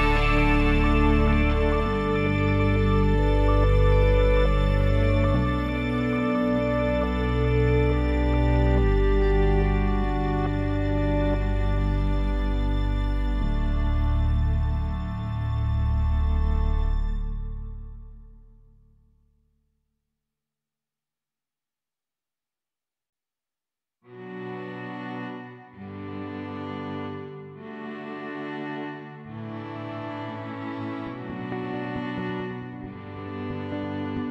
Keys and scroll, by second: 5.1 Delete, 6.5 Delete, 8.3-9.7 typing, 11.3 BackSpace, 11.8 e, 14.0 ctrl+s, 32.8 ctrl+c.